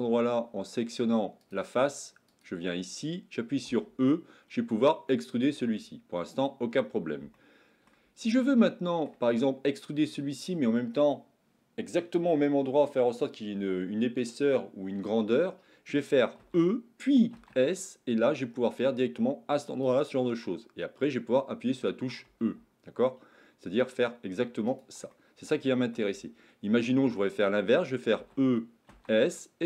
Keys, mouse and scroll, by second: 1.3 click, 2.2 click, 3.7 e, 7.3 shift+middle click, 8.7 shift+middle click, 16.3 e, 22.3 e, 25.2 middle click, 26.9 shift+middle click, 28.2 e.